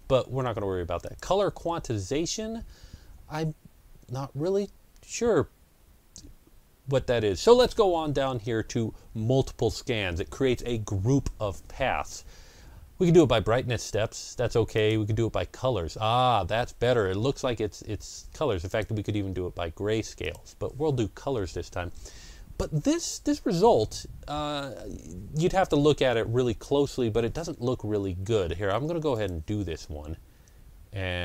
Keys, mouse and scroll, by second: 0.9 click, 0.9-3.1 ctrl+scroll up 1, 12.9 click, 18.5 click, 29.0 click, 30.6 click.